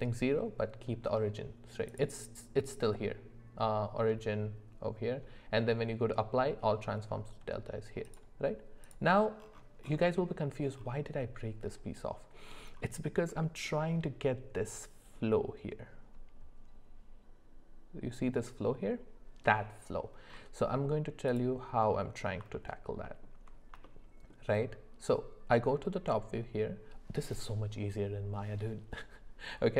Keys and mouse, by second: 1.9-7.9 drag, 8.8 click, 21.3 click, 22.5 alt+middle click, 23.9-24.3 shift+middle drag.